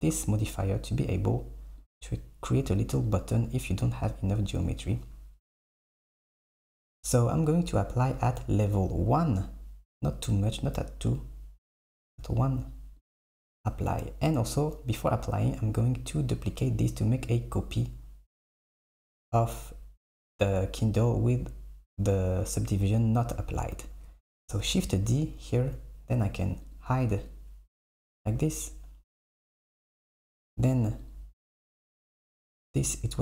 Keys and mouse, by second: 1.9 click, 2.2 KP_1, 3.1 click, 4.6 click, 5.7 click, 6.3 click, 10.5-14.6 drag, 14.6 Escape, 16.2 click, 24.7 shift+d, 26.7 click, 27.3 click, 30.2 click, 31.0 click, 31.3 KP_1.